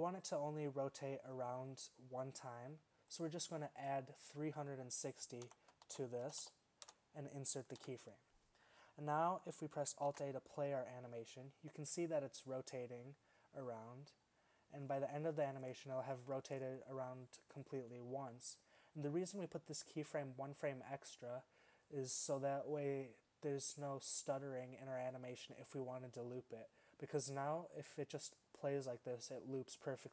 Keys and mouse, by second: 7.8 i, 10.3 alt+a.